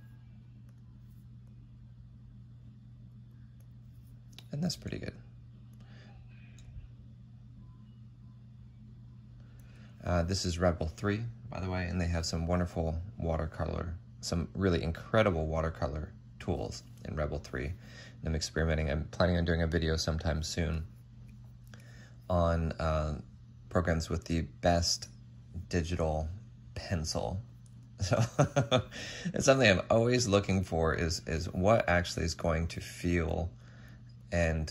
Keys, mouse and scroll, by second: 4.5 ctrl+z, 18.4 ctrl+z, 28.0 ctrl+z, 31.6 ctrl+z.